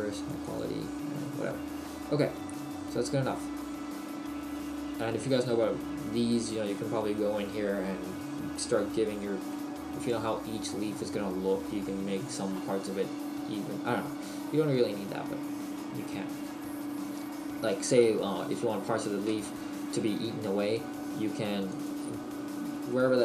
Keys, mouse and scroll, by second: 2.1 middle click, 3.6 middle click, 3.6-4.1 scroll down 1, 10.1 middle click, 14.3-14.9 scroll down 1, 14.9 middle click, 14.9-15.8 scroll down 1, 21.7 click.